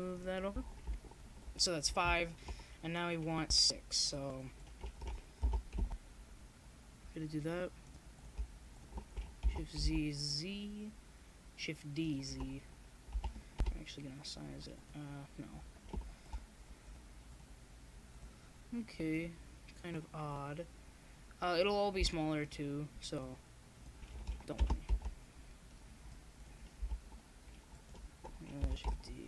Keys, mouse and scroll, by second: 0.6 KP_1, 3.4 shift+d, 5.4 ctrl+z, 6.2 click, 9.0 ctrl+z, 9.8 shift+d, 12.6 shift+d, 12.9 click, 13.9 shift+d, 14.7 click, 15.2-16.8 middle drag, 17.5 click, 18.9 click, 19.8 middle click, 20.3-21.6 right drag, 22.2-23.8 right drag, 22.2 shift+d, 25.1 right click, 26.4 shift+d.